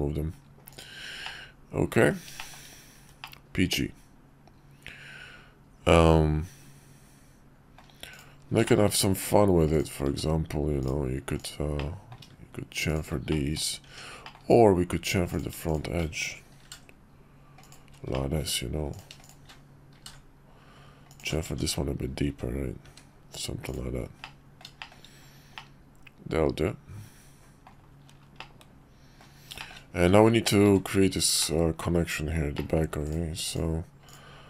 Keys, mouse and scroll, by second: 0.7 click, 1.2-2.1 middle drag, 2.4 shift+middle drag, 3.2-7.8 middle drag, 8.1-8.6 drag, 8.6 shift+middle click, 9.7 click, 10.1 Tab, 10.8 click, 11.4 click, 11.8 middle click, 12.9 click, 13.3 middle click, 13.9 Tab, 14.2 middle click, 15.3 click, 15.6 shift+click, 16.6 ctrl+b, 18.1 middle click, 18.9 click, 19.2 shift+click, 20.0 ctrl+b, 21.4 Tab, 22.3 `, 22.8 `, 24.2-24.6 middle drag, 24.8 shift+middle click, 25.5-27.7 middle drag, 28.4-29.2 middle drag, 29.6 shift+middle click, 30.7 `, 31.4 middle click, 32.5 middle click, 33.5 click, 34.0 click.